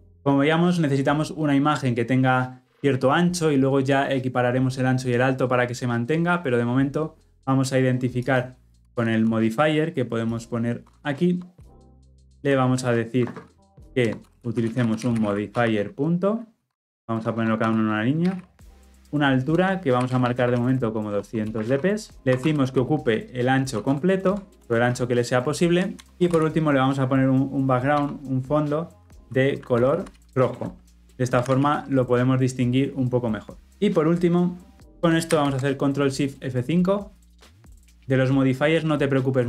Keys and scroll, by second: 8.8 Tab, 14.0 Return, 16.6 Escape, 19.5 Return, 22.1 alt+Return, 26.0 Return, 30.6 Return, 31.4 ctrl+alt+l, 31.6 ctrl+alt+o.